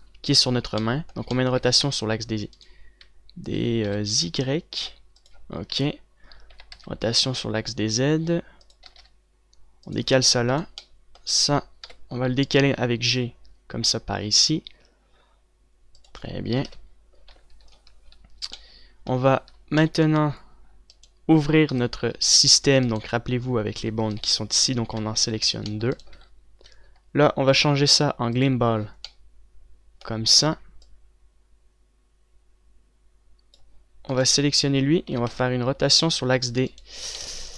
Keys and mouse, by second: 2.1 r, 4.1 r, 6.2 KP_7, 7.1 r, 9.5 g, 12.4 KP_7, 13.6 g, 16.6 click, 17.3 KP_1, 21.5 click, 22.3 KP_Decimal, 22.3 click, 22.8 z, 25.6 click, 26.1 c, 26.2-29.2 drag, 26.6 z, 30.0 click, 31.4-37.5 drag, 35.7 r.